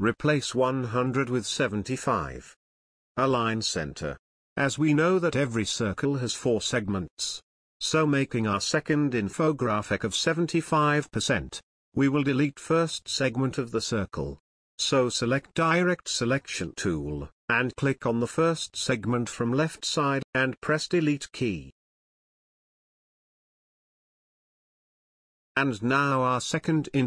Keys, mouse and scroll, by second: 0.4 t, 0.5-6.0 drag, 8.8 Right, 13.1 click, 14.3 space, 15.7-18.2 ctrl+drag, 24.2 Delete, 26.4-27.0 drag.